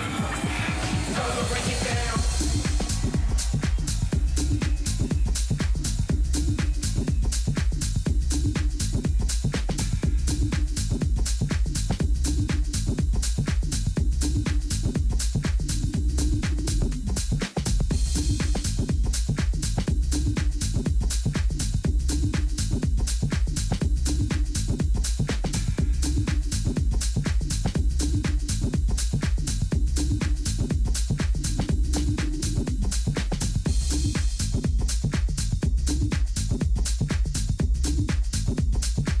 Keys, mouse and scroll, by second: 0.2-1.9 middle drag, 1.9 k, 7.8 Escape, 8.3-11.3 middle drag, 8.7 a, 12.3 KP_3, 19.5 ctrl+r, 26.5 a, 29.2 ctrl+r, 32.6 a, 33.0-35.5 middle drag, 36.0 Tab, 37.5 alt+h, 38.2-39.2 middle drag, 38.5 a.